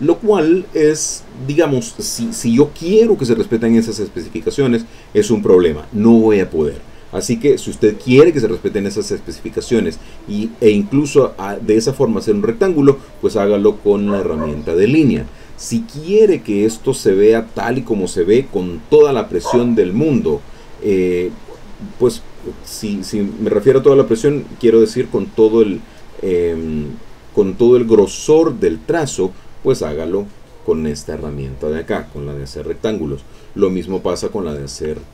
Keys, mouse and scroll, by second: 7.3 click, 8.2 middle click, 10.0 middle click, 10.6 middle click, 12.1 click, 14.1 click, 30.3 click, 33.0 click, 33.5 middle click, 34.6 click.